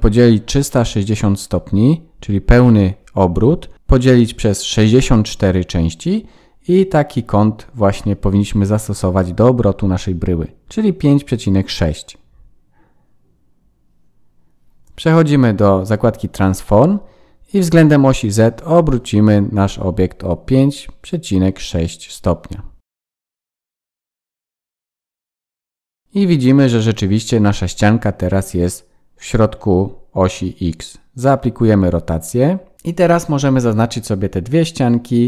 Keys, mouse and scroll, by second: 12.9 click, 16.9 click, 20.9 BackSpace, 24.2 Tab, 28.2 Tab, 28.9 ctrl+a, 30.7 middle click, 31.4 Tab, 31.9 click, 32.3 middle click, 32.9 KP_1, 34.2 middle click.